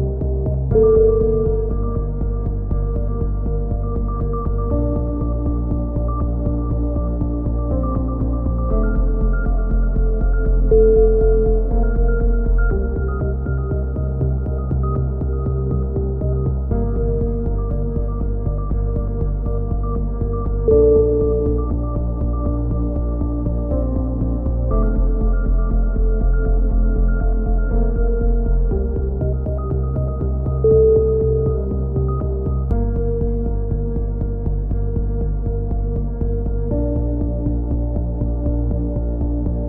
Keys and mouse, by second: 1.4 click, 2.2 z, 2.4 click, 5.9 s, 6.5 click, 7.4 right click, 7.7 click, 8.5 right click, 9.6 right click, 10.1 click, 11.0-12.0 drag, 12.0 a, 12.4 click, 13.2 KP_3, 13.5-14.5 right drag, 13.9 e, 14.5 click, 17.5 click, 19.0-20.4 drag, 19.2 right click, 20.5 click, 20.7 right click, 21.5 click, 22.3-23.5 right drag, 23.5 a, 24.9-26.1 right drag, 25.3 KP_7, 26.7 click, 27.7 KP_3, 28.3 right click, 28.5-29.5 drag, 29.5 a, 32.0 click, 32.9 KP_3, 36.2 right click, 36.7 shift+d, 37.8 right click, 38.0 click, 39.0 click, 39.2 right click, 39.5 e.